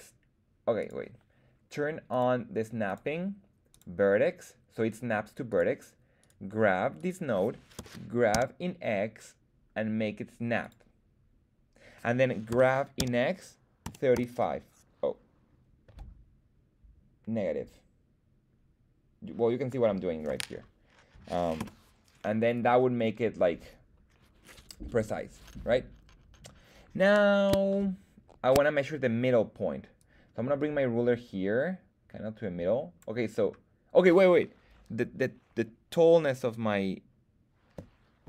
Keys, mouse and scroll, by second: 0.8 click, 2.1 click, 2.8-5.5 drag, 6.2 click, 6.2 right click, 6.9 click, 6.9 right click, 7.8 g, 8.3 x, 10.6 click, 12.5 g, 12.9 x, 13.8 KP_3, 14.1 KP_5, 15.8 KP_Subtract, 21.6 Return, 22.5-24.7 drag, 27.0-27.5 scroll down 3, 27.7 shift+middle click, 29.9-32.9 drag.